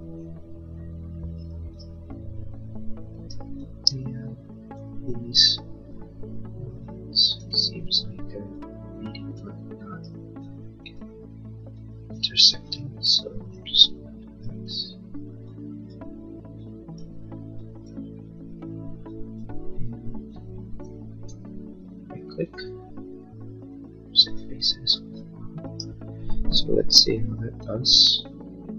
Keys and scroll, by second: 3.3 space, 26.9 l.